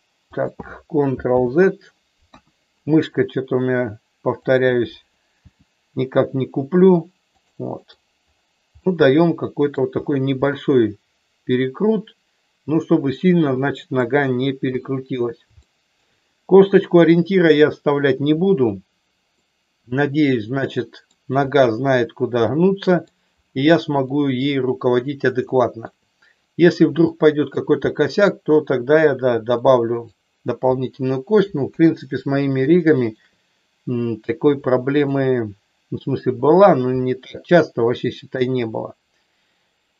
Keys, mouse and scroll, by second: 0.4 click, 1.3 ctrl+z, 2.2 KP_1, 4.3 click, 5.3 g, 7.3 click, 7.7 middle click, 8.8 middle click, 10.3-14.0 middle drag, 14.7 KP_1, 15.6 shift+middle click, 19.3-21.1 middle drag, 22.5 middle click, 24.1 middle click, 25.5 shift+middle click, 26.9 shift+middle click, 27.8 middle click, 29.6 middle click, 31.6 KP_1, 32.7 shift+middle click, 34.6 shift+middle click.